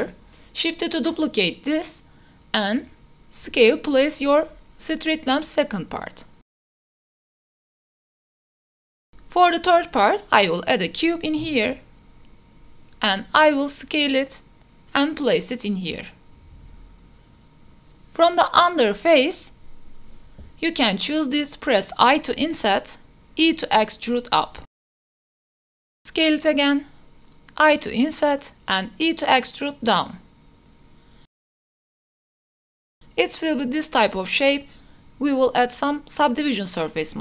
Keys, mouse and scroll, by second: 0.0-3.3 typing, 0.2 KP_Enter, 2.4 click, 3.2 click, 3.8 drag, 4.0 Tab, 4.6 3, 5.2 KP_3, 5.3 KP_1, 5.5 g, 6.7 Tab, 7.0-7.8 shift+middle drag, 8.3 shift+Tab, 8.5 shift+s, 9.3 Tab, 9.7 shift+a, 11.1 drag, 11.4 s, 12.7 click, 13.0-15.1 typing, 14.8 shift+click, 15.6 drag, 15.9 shift+drag, 16.1 drag, 16.7 shift+click, 16.9 middle drag, 17.1 Tab, 17.1 3, 17.1 i, 17.7 ctrl+a, 19.1-20.1 drag, 20.5 Tab, 21.3 i, 23.0 e, 24.5 click, 25.4 shift+middle click, 25.8 s, 26.7 click, 26.9-27.6 middle drag, 28.5 i, 30.3 e, 32.1 click, 32.4 middle drag, 32.7 s, 32.9 g, 33.1 z, 33.4 click, 33.5 Tab, 33.7-34.7 middle drag, 34.7 click, 35.3-36.2 drag, 36.5-37.1 middle drag.